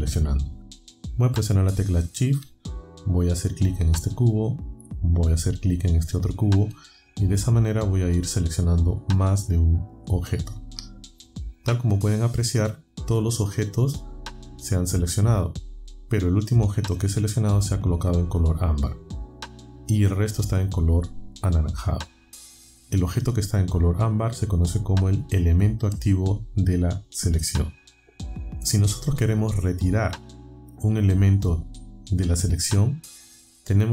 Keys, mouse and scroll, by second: 3.9 shift+click, 5.9 shift+click, 8.4 shift+click, 9.2 shift+click, 10.0 shift+scroll.